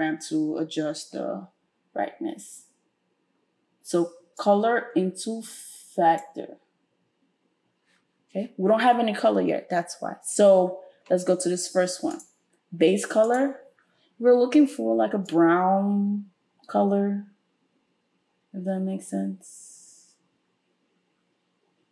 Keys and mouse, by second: 6.6-12.3 drag, 12.3 middle click, 13.2 click, 13.4-21.9 middle drag.